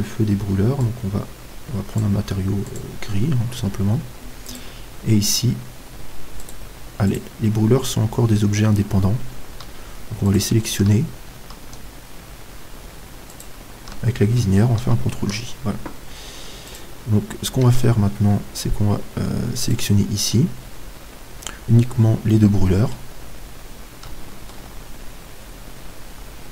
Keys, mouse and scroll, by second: 3.1-5.1 drag, 5.1-6.3 right drag, 6.3 middle click, 6.7-10.2 right drag, 10.2-11.7 middle drag, 11.7 right click, 13.7-15.8 right drag, 15.8 ctrl+j, 17.1-18.5 right drag, 18.1 Tab, 21.1-26.5 middle drag, 21.1 right click.